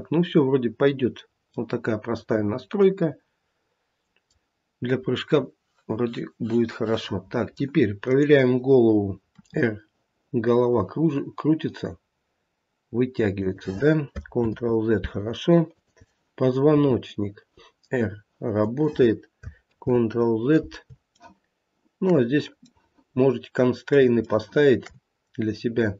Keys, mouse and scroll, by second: 0.9 scroll down 1, 1.5 middle click, 2.8 middle click, 7.0 middle click, 8.0 click, 9.4 r, 14.4 ctrl+z, 15.7 click, 16.7 r, 19.7 ctrl+z, 21.1 shift+middle click, 22.6 middle click, 23.6 middle click, 23.7 shift+middle click, 24.2 middle click, 24.4 shift+middle click, 25.2 scroll up 2, 25.6 scroll down 1.